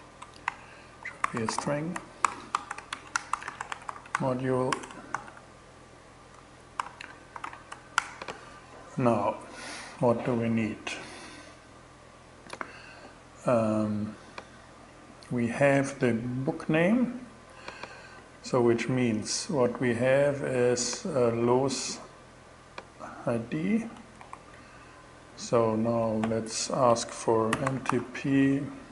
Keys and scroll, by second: 0.0-5.2 typing, 1.7 alt+6, 2.1 alt+shift+., 2.6 shift+Return, 6.2 alt+5, 6.8 alt+8, 6.9 alt+9, 7.1 alt+,, 7.4 Return, 23.6 super+c, 25.3 super+n, 26.3 shift+super+n, 26.7-27.8 typing.